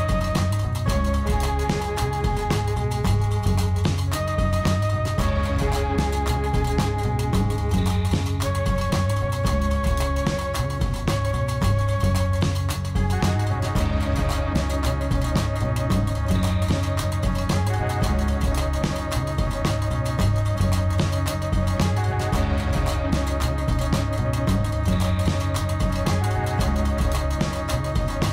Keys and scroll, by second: 15.2 ctrl+alt+0, 16.2 g, 18.2 Tab, 19.2 s, 20.4 Tab.